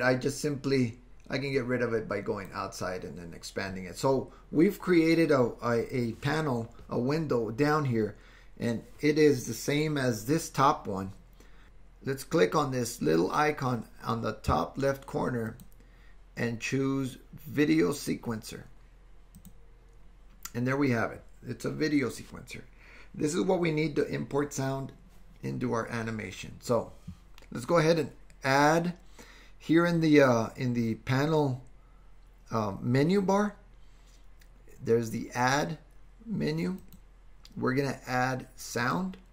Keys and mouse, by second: 1.5-2.5 drag, 15.6-19.5 drag, 36.8-39.2 drag.